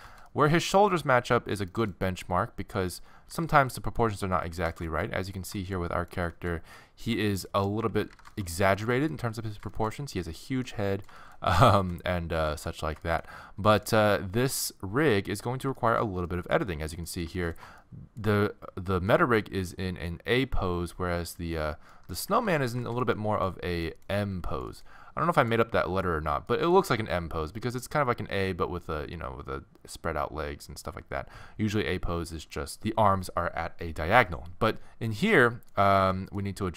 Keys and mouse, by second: 3.3 s, 7.9 z, 10.5 z, 14.9-18.0 middle drag, 22.2 z, 24.2 z, 28.1-32.7 middle drag, 35.4-36.7 middle drag.